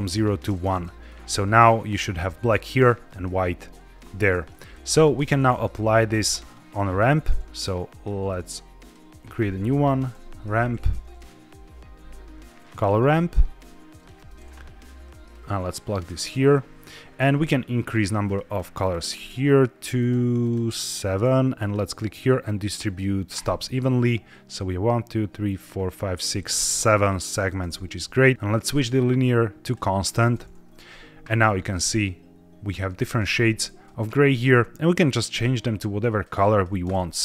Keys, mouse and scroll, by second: 0.5-1.0 middle drag, 1.0-3.6 scroll down 1, 4.4 click, 4.8 g, 5.7 shift+a, 8.2-12.6 drag, 13.8 click, 15.2-16.0 drag, 18.1 click, 18.4 click, 18.7 click, 19.0 click, 19.9 click, 20.3 click, 21.5-24.5 drag, 28.1 click, 28.5-29.8 drag, 31.3 middle drag, 32.5-33.7 scroll up 1, 33.7 click, 33.7-34.4 scroll up 3, 35.3 click, 36.1 click.